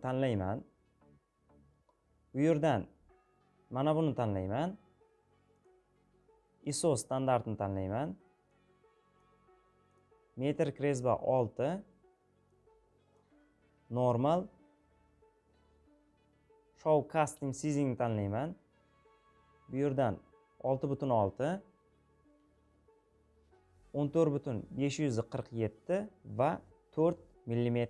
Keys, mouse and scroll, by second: 0.0-5.1 drag, 5.3-27.8 drag.